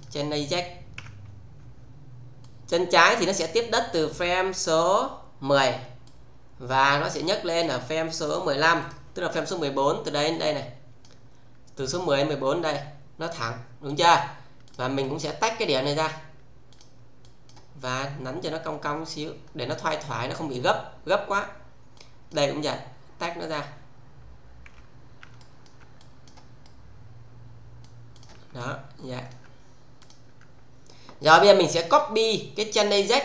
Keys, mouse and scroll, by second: 0.9 f, 2.4-4.8 click, 6.0-7.6 click, 8.3 click, 10.2-11.2 click, 13.8 click, 16.7 click, 17.9-20.3 middle click, 21.9-22.6 click, 23.4 click, 24.7 f, 25.3 alt+middle click, 26.0 click, 26.6-27.8 middle click, 28.1 click, 28.5-29.5 alt+middle click, 29.5-29.9 scroll down 1, 29.9 click, 31.9 click.